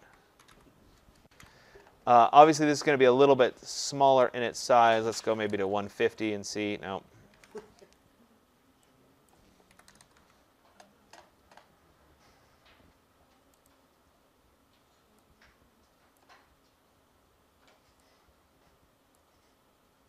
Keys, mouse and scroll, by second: 0.0-0.3 typing, 1.6 typing, 6.4 Tab, 6.4 click, 6.4 typing, 7.3 ctrl+a, 9.2 click, 9.2-10.1 typing, 13.6 click, 16.1 click, 19.0 click.